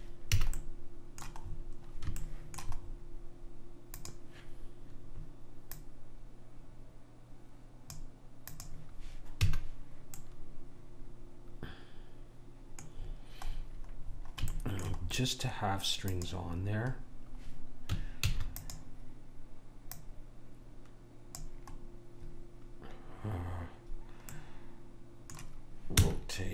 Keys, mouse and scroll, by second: 0.5 a, 4.1-7.7 drag, 8.7 click, 9.6 a, 10.4 middle click, 15.3 middle click, 16.3 click, 18.1-20.1 middle drag, 18.4 shift+d, 20.1 click, 24.5-26.1 middle drag, 26.1 r.